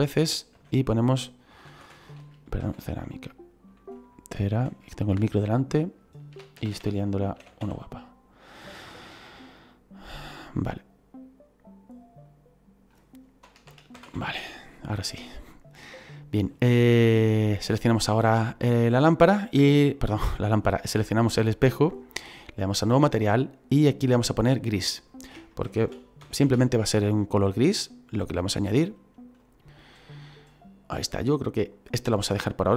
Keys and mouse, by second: 0.5-2.8 typing, 4.5 m, 4.6 i, 6.3-7.5 typing, 12.2 click, 13.6 BackSpace, 14.0 a, 15.0 click, 17.6 right click, 22.9 click, 24.2 click, 25.7 shift+g, 25.9 r, 26.2 i, 26.5 s, 27.8 click.